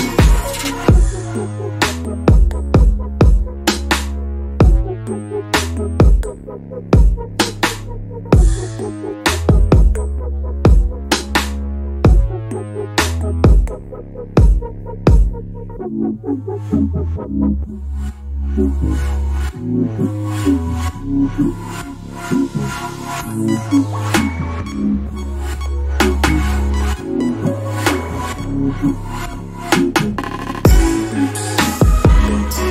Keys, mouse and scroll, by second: 0.4 alt+click, 1.6 alt+middle click, 2.5 click, 3.5 alt+middle click, 3.8 alt+click, 6.0-6.4 scroll up 1, 6.4 middle click, 9.0 alt+click, 16.9 middle click, 17.8-18.3 scroll up 2, 18.3 alt+middle click, 19.8 click, 20.2 double click, 21.8 right click, 22.7 click, 27.6 right click, 29.4 click, 29.9 alt+middle click, 30.1-30.6 alt+scroll up 2, 30.7 click.